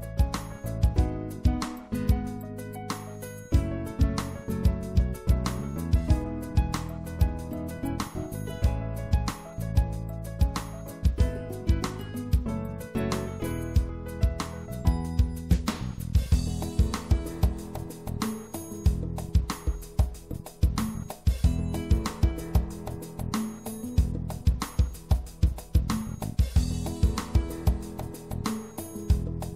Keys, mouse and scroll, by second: 2.2 right click, 2.6 middle click, 4.5-6.2 drag, 9.2-11.2 drag, 12.0-14.0 drag, 14.2-16.1 drag, 17.7-20.1 drag, 20.1 middle click, 23.2-25.6 right drag, 27.4 right click, 29.3 middle click.